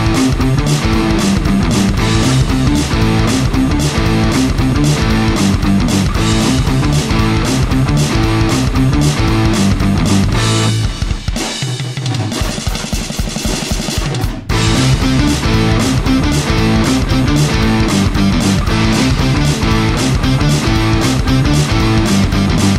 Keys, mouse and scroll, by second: 0.0 KP_0, 4.5 k, 4.9 KP_0, 6.2-15.3 shift+right drag, 6.8 click, 7.4 click, 8.1 F9, 9.5 click, 10.1 click, 10.3 F9, 14.1 click, 14.1 middle click, 14.5-15.3 drag, 14.5 middle click, 16.2-18.3 shift+right drag, 16.9 F9, 18.1 click, 18.1 middle click.